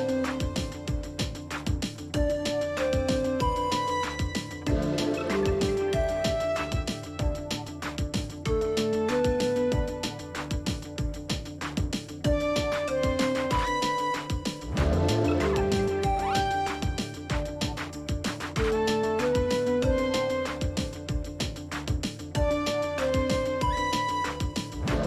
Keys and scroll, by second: 1.2-2.8 typing, 4.9-5.7 typing, 6.0 Return, 7.4 shift+Up, 8.0 Up, 8.2 Up, 8.3 Up, 11.8 Up, 11.9-12.4 Up, 13.0 Up, 14.4-15.1 Up, 15.8 Up, 15.9 Up, 16.5-17.1 Right, 18.4-19.1 Right, 19.5 Left, 19.6 Left, 19.7 Left, 20.1 Left.